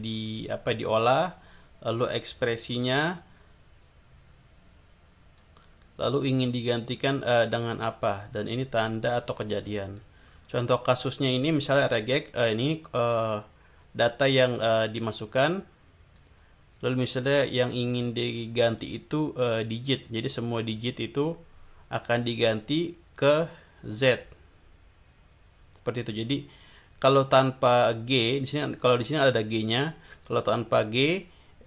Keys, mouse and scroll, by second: 2.5-5.5 drag, 6.7-8.3 drag, 8.7-10.1 drag, 10.3 scroll down 1, 13.2-16.3 drag, 18.7-20.3 drag, 23.9 click, 29.1-30.5 drag.